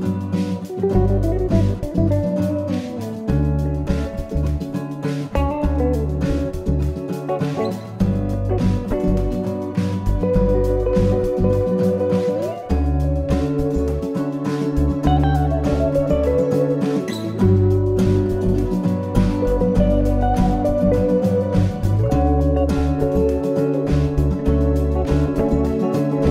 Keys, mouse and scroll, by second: 0.2 s, 3.1 click, 4.6-5.0 scroll up 1, 5.0-7.4 scroll down 4, 8.5 middle click, 12.0 scroll up 2, 12.2-12.5 scroll down 2, 12.5-13.4 scroll up 2, 13.4-15.2 scroll down 1, 15.9 click, 18.6 click, 22.2 click, 24.4 click.